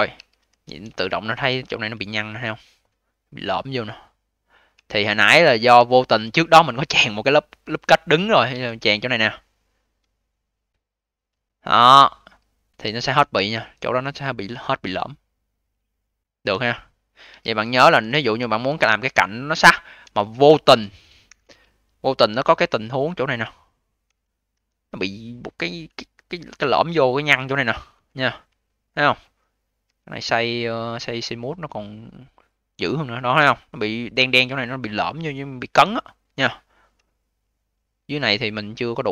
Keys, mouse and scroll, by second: 0.1 q, 0.3 v, 0.8-2.0 alt+drag, 2.0-4.6 alt+middle drag, 4.6 q, 5.1 v, 5.7-6.7 alt+drag, 8.4 a, 12.7 q, 13.1 v, 13.5-14.0 scroll up 5, 14.0 alt+click, 14.8 alt+middle click, 15.3-16.4 alt+drag, 16.4-17.2 scroll down 2, 17.2 q, 17.5 v, 18.1-18.9 alt+drag, 18.9-19.4 alt+middle drag, 19.4-21.2 alt+drag, 21.2 ctrl+Delete, 22.3 q, 22.6-23.1 scroll up 2, 23.1-24.4 alt+drag, 24.4 v, 25.3-25.8 scroll down 5, 25.8-29.7 alt+drag, 29.7 a, 31.0 click, 31.2-32.8 right drag, 32.8-35.9 scroll up 2, 36.0-36.9 scroll down 9, 36.9-38.1 alt+middle drag, 38.1 scroll up 1, 38.8-39.1 scroll down 5.